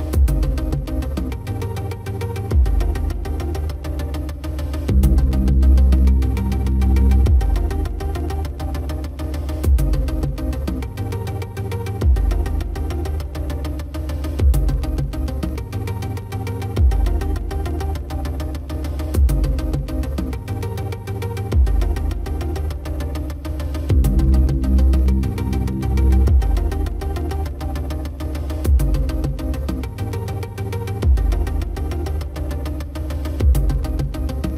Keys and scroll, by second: 0.5 Return, 3.2 ctrl+t, 13.8 Return.